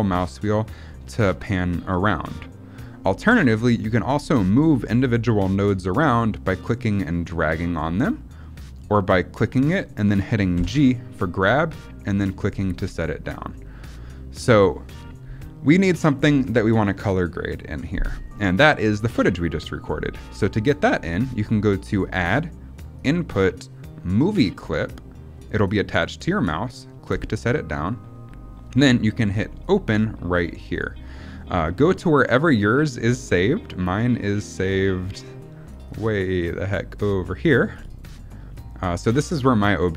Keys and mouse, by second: 6.4-8.7 drag, 9.2 click, 10.5 g, 13.5-14.5 middle drag, 18.3 middle click, 21.9-27.1 drag, 29.5 click.